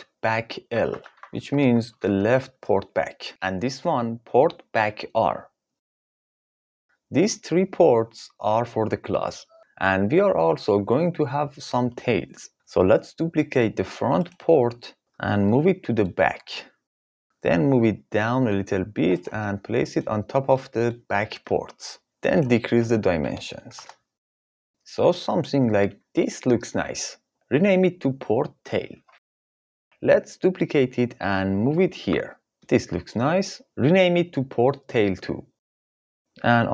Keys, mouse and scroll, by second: 2.9 click, 3.4 click, 4.5 F2, 12.5 KP_3, 12.7 click, 14.5 shift+d, 15.2 click, 17.3 g, 18.7 click, 20.0 middle click, 21.9 KP_3, 21.9 KP_6, 23.0 click, 23.7-24.7 drag, 27.5 F2, 30.2 shift+d, 33.0 F2.